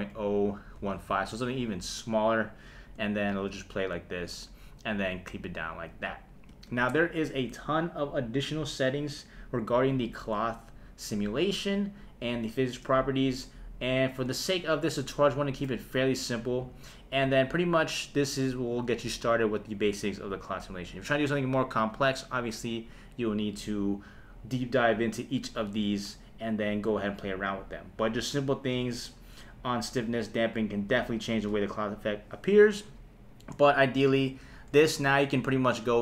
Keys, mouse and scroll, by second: 2.6 shift+Left, 3.3 space, 6.5 space, 34.4 shift+Left, 35.8 click.